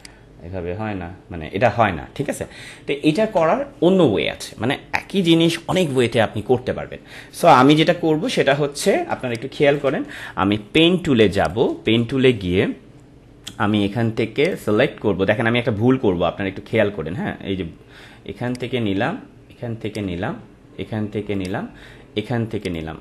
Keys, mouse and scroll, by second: 2.5 Return, 3.3 Delete, 8.4 Delete, 8.7 ctrl+=, 9.1 space, 9.3 click, 9.6 space, 11.3 click, 14.4 click, 18.5 click.